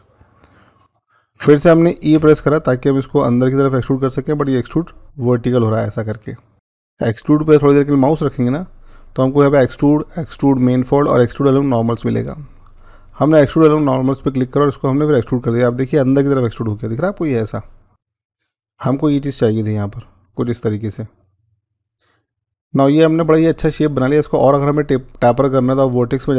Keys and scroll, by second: 2.0 e, 6.5 z.